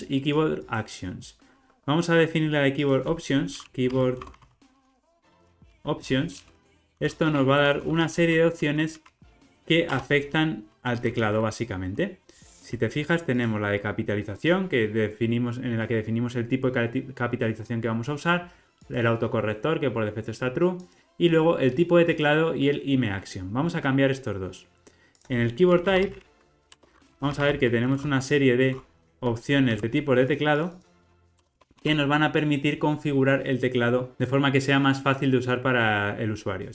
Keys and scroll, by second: 1.3 alt+super+[, 5.9 Return, 13.3 super+b, 23.6 alt+super+[.